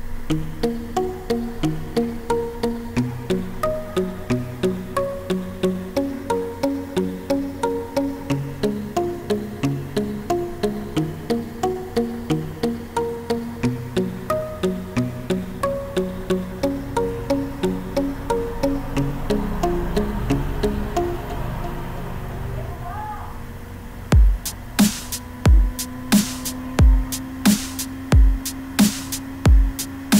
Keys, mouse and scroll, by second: 19.9 F1, 20.3 space.